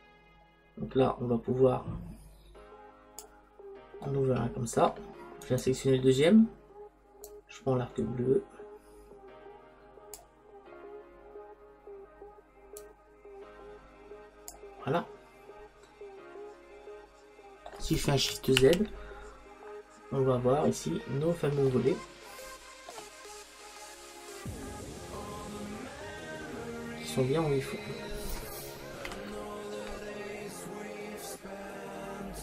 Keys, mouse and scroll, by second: 4.1-5.5 middle drag, 5.5-9.1 right drag, 7.3 click, 12.8 click, 15.0-16.9 middle drag, 18.9 shift+z, 21.9-24.1 middle drag, 25.7-27.1 middle drag, 27.1-28.2 scroll down 2, 27.7 middle click, 28.2-29.2 middle drag, 29.3 KP_5.